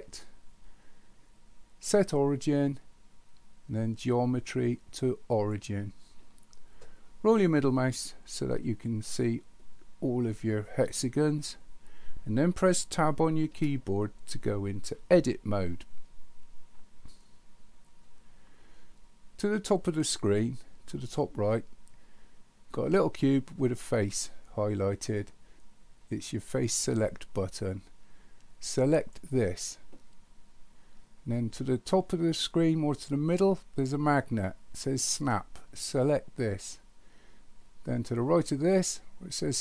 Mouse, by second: 28.9 click, 36.0 click.